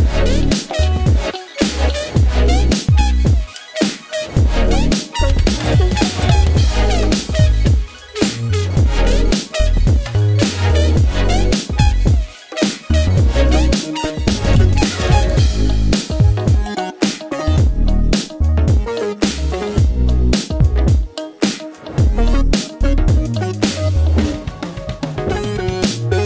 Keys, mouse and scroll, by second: 2.2-5.9 drag, 6.5 click, 8.3 p, 10.2 click, 12.4 click, 14.0-15.3 drag, 17.0 s, 18.8-25.2 drag.